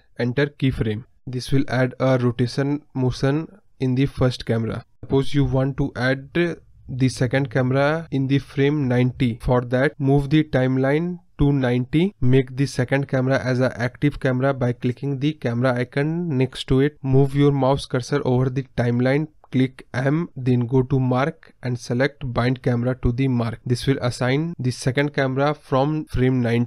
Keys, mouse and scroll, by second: 6.5 space, 6.8 space, 8.7-22.6 drag, 22.6 m, 24.2 ctrl+z, 25.4 click, 25.7 Left.